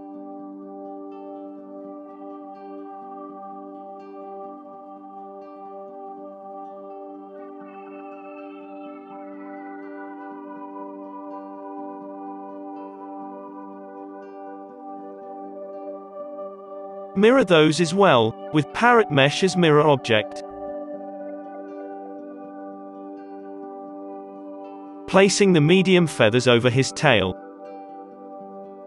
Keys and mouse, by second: 1.1-2.1 drag, 2.0 z, 2.0 KP_5, 2.1 middle click, 2.3-4.4 drag, 3.6 r, 4.4-6.7 middle drag, 4.4 r, 4.4 g, 5.3 Tab, 5.6 1, 5.7 z, 5.9 alt+a, 6.7-8.3 drag, 7.2-11.7 typing, 8.3 Tab, 8.6-9.8 middle drag, 8.7 alt+a, 10.3-13.1 drag, 11.3 alt+a, 11.8 alt+a, 12.8 g, 13.0 g, 13.1 middle click, 13.2-14.6 drag, 13.2 alt+a, 13.7 KP_5, 14.9 middle click, 15.3-17.3 drag, 17.3 middle click, 17.5-19.0 drag, 19.0 middle click, 19.4 ctrl+l, 19.9 ctrl+z, 20.1 ctrl+l, 20.3 Down, 20.7 Down, 20.8 alt+a, 20.8-22.8 middle drag, 22.8-24.0 drag, 22.9 KP_7, 23.3 shift+d, 23.6 s, 24.1 click, 25.1-28.8 typing, 27.5 click.